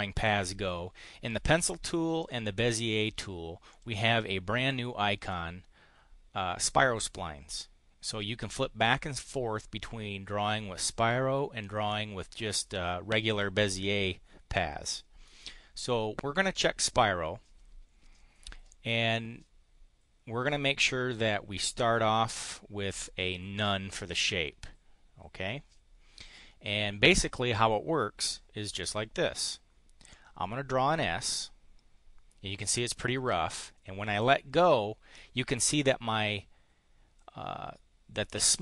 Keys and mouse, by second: 2.2 click, 3.6 click, 8.8 click, 30.0-33.4 drag.